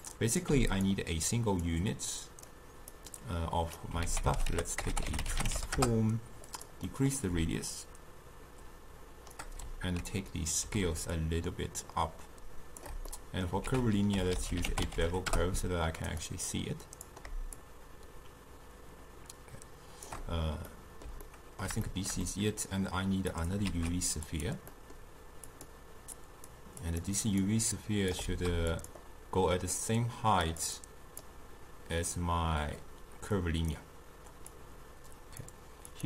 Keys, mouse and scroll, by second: 3.9-6.6 drag, 6.6 ctrl+a, 7.8-16.2 shift+drag, 16.2 ctrl+a, 17.7-20.7 shift+drag, 20.7-23.7 middle drag, 23.7 shift+d, 35.5-36.0 drag.